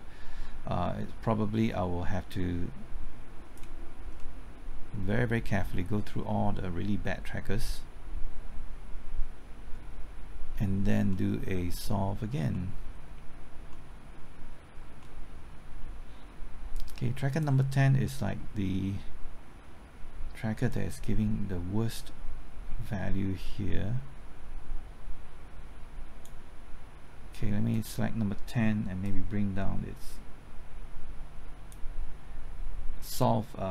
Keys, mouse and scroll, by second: 4.1-12.5 middle drag, 12.5-13.6 middle drag, 13.6 middle click, 16.7-33.7 drag.